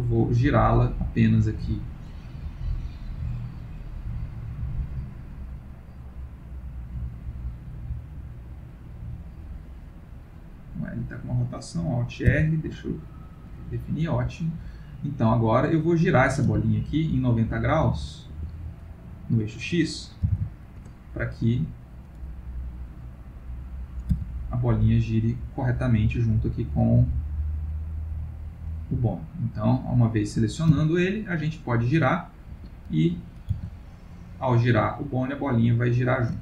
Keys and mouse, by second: 3.7 click, 5.1 click, 10.8 click, 12.3 alt+r, 16.4 r, 19.2 click, 22.6 click, 23.4 click, 24.1 r, 26.6 click, 27.5 click, 29.6 click, 30.7 click, 30.7 r, 32.8 middle click, 33.6 r.